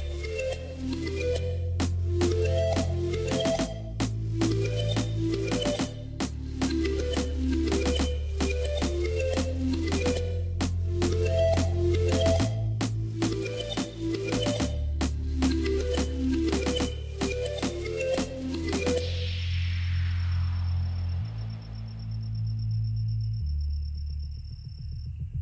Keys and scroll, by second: 0.2 s, 0.5 y, 1.9 s, 2.1 x, 2.8 Tab, 2.9 g, 3.4 z, 5.8 Tab, 6.3 1, 6.5 shift+z, 7.6-11.1 typing, 12.2 a, 12.6 s, 12.8 x, 16.1 3, 17.6 i, 20.9 ctrl+r, 22.4 ctrl+r, 24.4 ctrl+r.